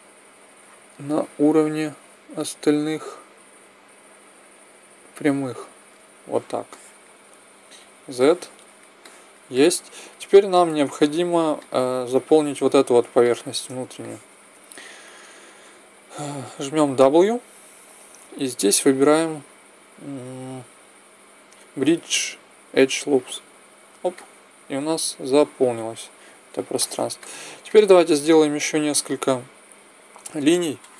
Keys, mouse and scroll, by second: 6.7-7.7 middle drag, 7.7 z, 8.6 middle click, 8.8 middle click, 10.6 ctrl+Tab, 13.3 middle click, 15.5 middle click, 16.6 w, 24.1-25.8 middle drag, 25.9 middle click, 26.3 middle click, 26.7-29.9 middle drag.